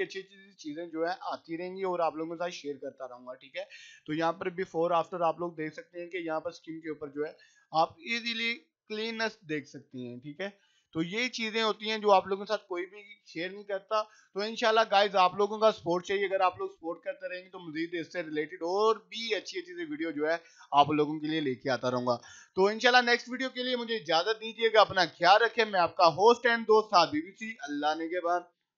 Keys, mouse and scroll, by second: 0.9 click, 1.8 scroll up 1, 2.7 click, 3.0-3.5 scroll up 1, 3.5 click, 4.4 scroll up 1, 5.4 click, 6.0 scroll up 1, 6.4-7.9 drag, 8.2 scroll up 1, 9.1-10.5 drag, 10.6-11.0 scroll up 1, 11.0-14.4 drag, 15.5 scroll down 1, 16.5 click, 16.7 scroll down 1, 18.1 click, 18.3-18.7 scroll down 1, 18.9 click, 19.2 scroll down 1, 20.5 click.